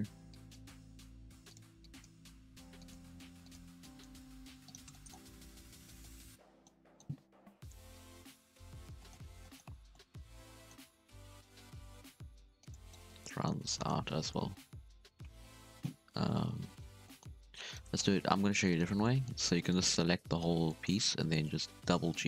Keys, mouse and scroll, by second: 0.0 1, 0.3 click, 0.6 g, 1.8 click, 2.0 g, 3.2 g, 3.8 drag, 4.1 g, 4.9 shift+middle drag, 5.1-6.0 scroll down 3, 5.3 Tab, 5.6 z, 6.0-6.6 middle drag, 6.6 scroll up 4, 6.8-7.4 middle drag, 7.4 KP_1, 8.0 ctrl+KP_1, 8.5 Tab, 8.7 z, 8.9 shift+middle drag, 9.2 scroll up 1, 9.4-9.7 middle drag, 9.7 alt+a, 9.9-11.0 middle drag, 11.0 ctrl+r, 13.0 middle click, 13.9 2, 14.3 alt+a, 16.1 KP_3, 17.0 middle click, 17.6 alt+shift+right click, 17.9 scroll down 4, 18.0 middle click, 18.5 scroll up 2, 18.6-21.0 middle drag, 21.0 g.